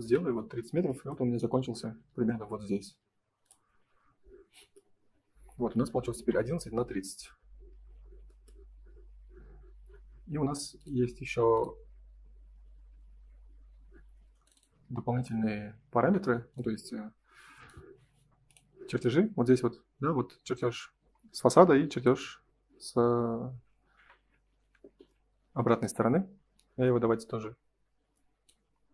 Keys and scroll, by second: 0.0 Return, 0.6 space, 24.9 Print.